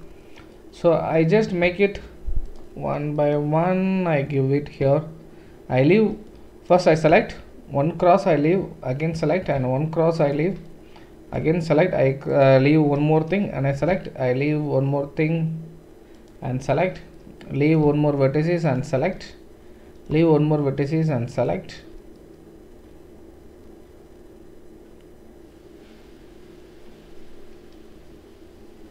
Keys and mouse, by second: 2.4 shift+click, 3.6-16.9 right drag, 12.3 shift+click, 12.3 shift+middle click, 16.2 shift+click, 16.2 shift+middle click, 16.9 click, 17.3-18.6 right drag, 18.6 shift+middle click, 18.7-28.9 shift+right drag.